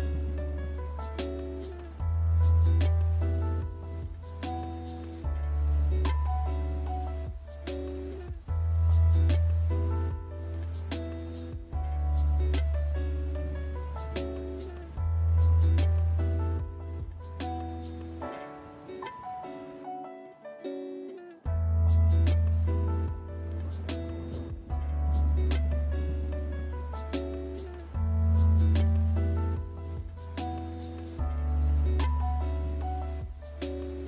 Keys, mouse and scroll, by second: 0.0 click, 0.2 alt+right click, 1.2 middle click, 1.4 middle click, 1.5 middle click, 1.6 alt+middle click, 1.6 alt+middle click, 2.0 click, 2.1 click, 2.3 click, 2.5 click, 2.7 middle click, 2.7-3.1 scroll, 3.0 click, 3.7 click, 4.1 click, 4.3 middle click, 4.3 click, 4.6 middle click, 4.9 alt+right click, 5.0 click, 5.1 click, 5.4 alt+right click, 5.6 middle click, 5.9 alt+right click, 6.0 click, 6.1 click, 6.2 click, 6.3 click, 6.5 click, 6.8 middle click, 7.0 click, 7.2 click, 7.3 click, 7.4 click, 7.5 click, 7.6 click, 7.8 click, 7.8 click, 8.1 middle click, 8.3 click, 8.4 click, 8.5 click, 8.6 click, 8.7 click, 8.9 click, 9.3 click, 9.3 middle click, 9.4 alt+middle click, 9.6 middle click, 9.8 middle click, 9.8 alt+middle click, 10.0 alt+middle click, 10.2 click, 10.3 click, 10.5 click, 10.6 click, 10.7 click, 12.5 alt+middle click, 12.5 alt+right click, 12.7 alt+right click, 12.8 click, 12.9 click, 13.0 click, 13.4 middle click, 13.8 alt+click, 14.0 alt+right click, 14.0 alt+click, 14.1 click, 14.9 click, 15.1 click, 15.2 click, 15.5 middle click, 15.6 click, 15.7 click, 15.9 middle click, 16.1 click, 16.2 click, 16.3 click, 16.4 click, 16.6 click, 16.8 middle click, 17.1 alt+right click, 17.3 click, 17.6 click, 17.8 click, 17.9 click, 18.1 right click, 18.5 middle click, 18.6 click, 18.9 click, 19.1 alt+right click, 19.3 middle click, 19.4 alt+middle click, 20.0 middle click, 20.1 middle click, 20.4 alt+middle click, 20.5 middle click, 21.7 click, 22.0 middle click, 22.0 click, 22.3 click, 22.4 click, 23.4 click, 23.7 middle click, 24.1 click, 24.3 alt+right click, 24.4 click, 24.6 click, 24.7 click, 25.0 click, 25.2 click, 25.5 right click, 25.8 middle click, 26.0 alt+middle click, 26.1 click, 26.2 click, 26.3 click, 26.7 middle click, 26.8 alt+middle click, 27.1 middle click, 27.3 shift+middle click, 27.5 click, 27.6 click, 27.8 click, 27.9 click, 28.0 click, 28.2 middle click, 28.4 middle click, 28.4 shift+middle click, 28.5 click, 28.6 click, 28.7 click, 28.8 click, 29.0 middle click, 29.2 middle click, 29.3 click, 29.6 middle click, 29.8 click, 29.9 click, 30.0 click, 30.3-30.6 middle click, 30.4 middle click, 30.5 alt+middle click, 30.6 alt+middle click, 30.8 middle click, 31.0 middle click, 31.2 shift+middle click, 31.4 middle click, 31.6 middle click, 32.1 click, 32.1 click, 32.4 middle click, 32.6 shift+middle click, 32.7 middle click, 33.0 middle click, 33.1 middle click, 33.1 middle click, 33.3 middle click, 33.4 middle click, 33.6 middle click, 33.8 middle click, 33.9 middle click.